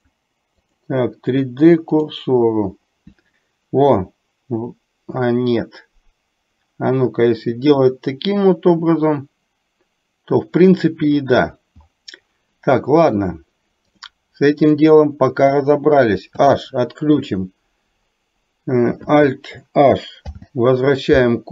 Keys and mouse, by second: 0.2-2.1 drag, 14.0 click, 14.7 click, 16.3 h, 20.3 alt+h.